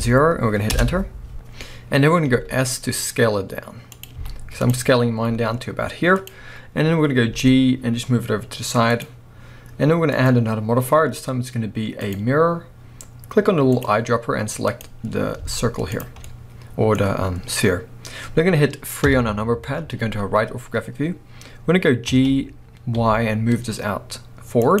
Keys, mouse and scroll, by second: 0.8 Return, 4.2 z, 4.9 scroll up 1, 5.1 s, 6.3 click, 7.3 g, 9.1 click, 10.2-13.8 drag, 15.4 z, 16.2-24.8 middle drag, 19.1 KP_3, 22.1 g.